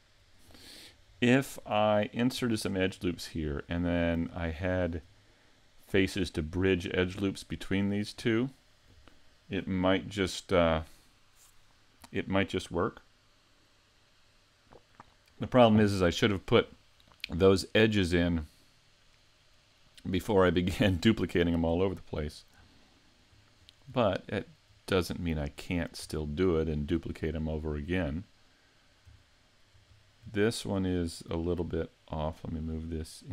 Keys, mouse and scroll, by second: 1.7 middle click, 2.6 shift+middle click, 3.9 scroll down 2, 4.5 shift+middle click, 22.1 scroll down 4, 22.8 shift+middle click, 23.6-24.0 scroll up 5, 24.0 shift+middle click, 26.2 shift+middle click, 27.4 middle click, 29.2 shift+middle click, 29.9-30.6 scroll down 2, 30.4 shift+middle click, 31.0 right click, 32.1 click.